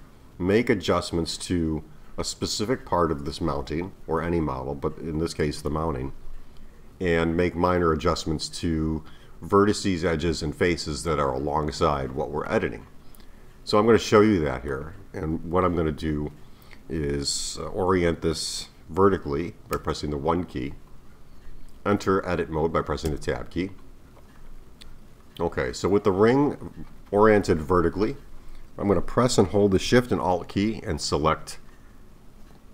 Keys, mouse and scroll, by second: 12.5-19.7 middle drag, 19.7 KP_1, 23.1 Tab, 24.7 KP_1, 25.5-28.5 scroll up 2.